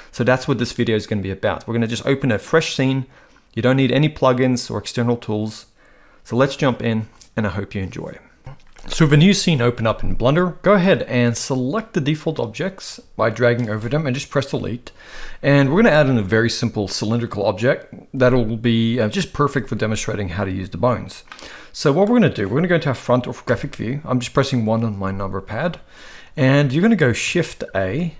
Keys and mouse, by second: 10.8-12.9 drag, 14.5 Delete, 21.4-22.1 middle drag, 23.5 KP_1, 27.8 shift+a.